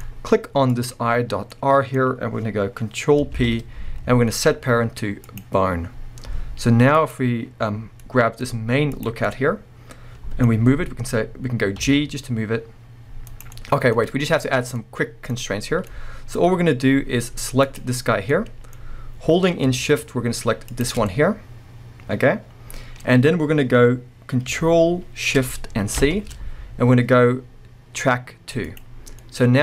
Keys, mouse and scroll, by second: 0.0-0.7 scroll up 2, 0.7 click, 0.9-7.0 middle drag, 3.3 ctrl+p, 5.8-7.0 scroll down 2, 7.0-8.0 drag, 8.0-8.9 middle drag, 8.9 click, 9.1-17.6 middle drag, 10.5-11.8 scroll down 2, 11.8 g, 13.4 right click, 13.9-14.8 scroll up 2, 17.6 click, 18.3-20.7 middle drag, 19.3-20.7 scroll up 2, 20.7 shift+click, 21.1-25.1 middle drag, 26.0 ctrl+shift+c, 29.2 scroll down 1, 29.2 middle click.